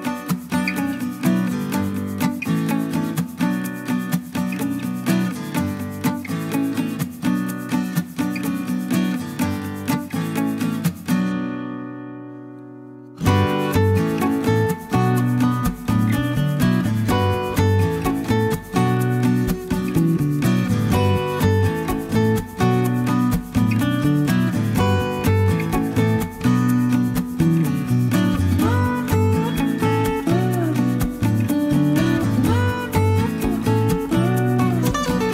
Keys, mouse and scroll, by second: 1.1 click, 3.4-5.2 drag, 5.4 click, 6.7 click, 8.3 click, 8.9 click, 13.2 click, 19.0 click, 19.5 click, 19.6 0, 21.5 click, 24.3 5, 24.4 click, 24.6 0, 25.4 click, 25.9 click, 26.7-27.7 typing, 28.7 click, 30.1 click, 31.4 click, 32.6 middle click, 34.5 click.